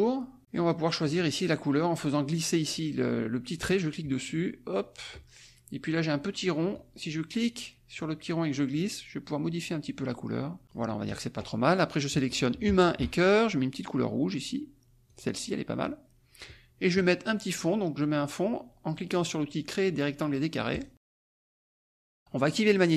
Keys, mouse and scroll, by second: 1.0-2.3 drag, 3.5-5.7 drag, 8.0-10.9 drag, 11.0 click, 12.5 click, 12.9 shift+click, 15.1 click, 20.7 click.